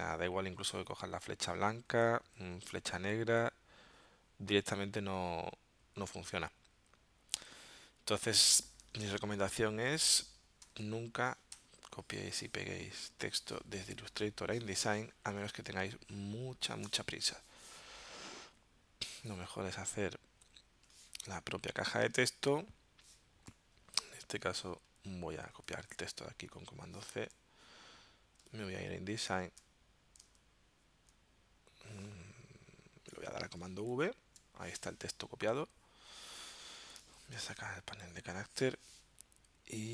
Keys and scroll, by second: 1.9 a, 8.9 BackSpace, 9.9 BackSpace, 10.7 c, 11.5 v, 14.1 BackSpace, 15.0 space, 17.3 t, 22.1 super+Tab, 25.5 super+a, 25.9 super+c, 28.8 super+Tab, 33.9 super+v, 37.1 super+t.